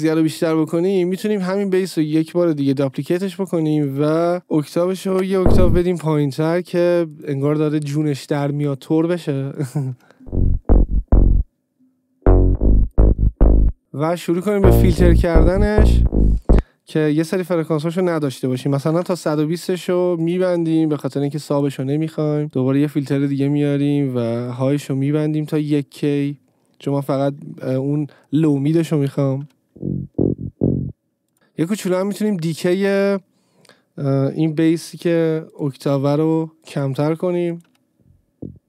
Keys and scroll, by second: 4.5 ctrl+a, 5.5 shift+Down, 10.3 space, 16.6 space, 18.8 1, 19.3 Return, 29.8 space, 31.3 space, 38.0 space.